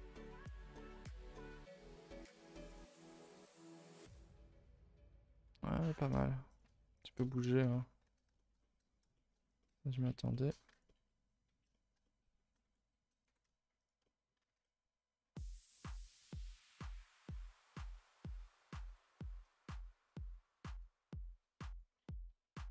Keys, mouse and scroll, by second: 0.1 r, 0.7 middle click, 1.5 Tab, 1.7 a, 1.8 a, 1.9 scroll down 1, 2.3 middle click, 2.7 scroll down 4, 3.0 middle click, 3.3 KP_0, 3.7 z, 5.0 Tab, 5.4 r, 5.9 g, 6.6 z, 7.2 middle click, 7.6 Tab, 7.7-8.3 scroll up 1, 8.3 shift+middle click, 8.5-9.1 scroll up 9, 9.1 scroll down 1, 9.1 shift+middle click, 9.4 scroll up 1, 9.6 middle click, 10.5 scroll up 2, 10.7 Tab, 10.8-12.6 middle drag, 12.6 r, 13.2 g, 14.0 middle click, 14.4 a, 14.5 a, 14.6-17.0 middle drag, 17.0 l, 17.2 middle click, 18.1 r, 19.2 g, 20.2-21.7 middle drag, 21.7-22.1 scroll up 5, 22.1 middle click.